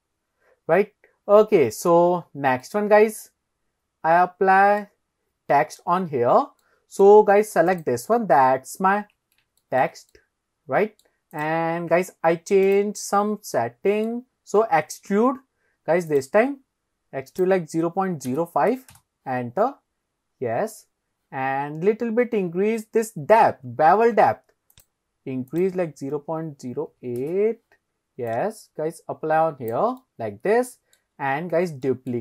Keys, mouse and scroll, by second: 2.2-2.6 scroll up 2, 2.7-4.8 middle drag, 6.3-7.1 scroll down 2, 6.6-7.1 middle drag, 7.3 scroll up 1, 7.7 click, 9.6 shift+middle click, 10.1-11.1 middle drag, 11.4 click, 12.7 click, 13.6-14.1 middle drag, 16.1-19.0 drag, 19.7-20.5 scroll up 3, 20.7-21.4 scroll down 1, 21.4 scroll down 1, 23.7-24.4 scroll down 1, 24.8-27.3 drag, 28.3 click, 30.0-31.0 middle drag, 31.2 scroll down 2, 31.9-32.2 shift+middle drag.